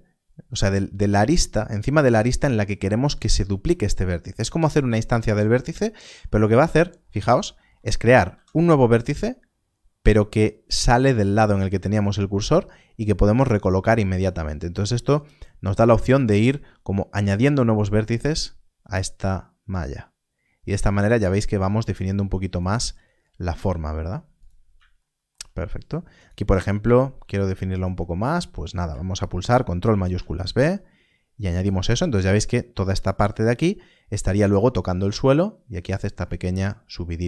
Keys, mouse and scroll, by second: 7.6-8.1 scroll, 8.2 alt+d, 15.6 alt+d, 17.0 alt+d, 21.9 alt+d, 22.9 g, 24.3 click, 25.4-26.1 shift+scroll down 1, 26.1 click, 26.6 g, 27.6 shift+click, 29.8 ctrl+shift+b, 31.5 click, 33.8 click, 33.9 scroll down 1, 37.1 Tab.